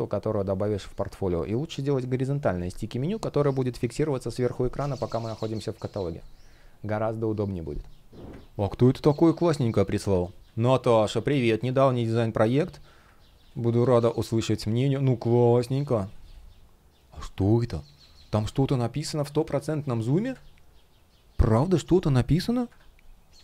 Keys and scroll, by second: 8.5 space, 13.2 space, 17.9 shift+0, 18.2 space, 22.4 super+\.